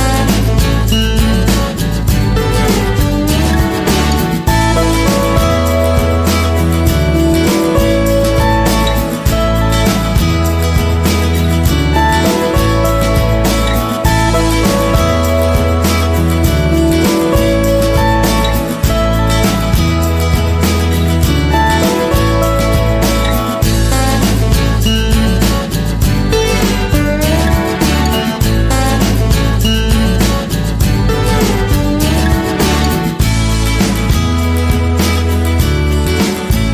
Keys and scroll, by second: 4.7 Return, 9.7 ctrl+=, 20.1 ctrl+a, 21.9 ctrl+a.